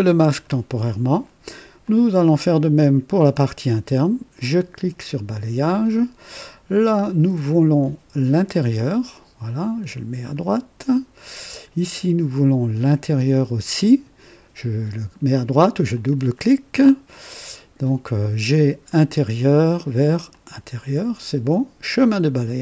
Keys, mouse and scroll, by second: 1.8 click, 4.5 click, 8.5 click, 10.3 click, 13.3 click, 15.9 click, 18.9 click, 20.3 click, 21.9 click.